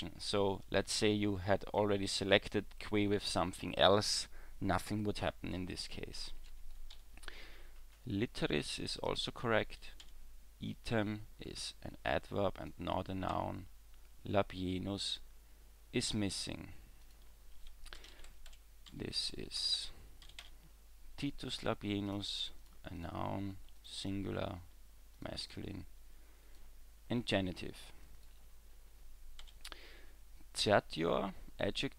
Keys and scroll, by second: 6.9 w, 10.0 w, 13.3 w, 29.4 w.